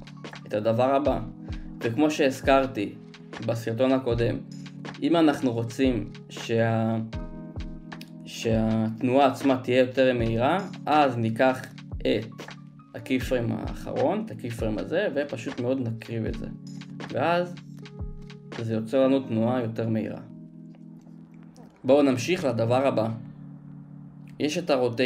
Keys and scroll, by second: 0.8 space, 17.9 space, 19.2 space.